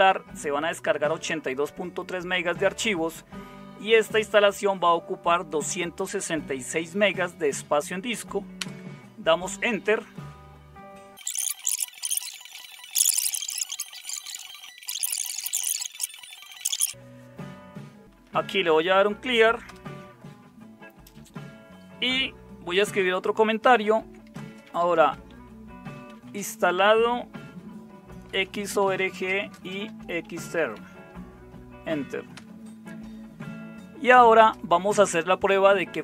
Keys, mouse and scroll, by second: 8.5 Return, 12.3 ctrl++, 12.6 ctrl++, 14.5 super+4, 14.5 super+Return, 14.7 typing, 15.7-16.6 typing, 17.8-18.9 typing, 19.6 Return, 23.8-26.7 typing, 28.0-31.2 typing, 32.3 typing, 33.8-34.5 typing.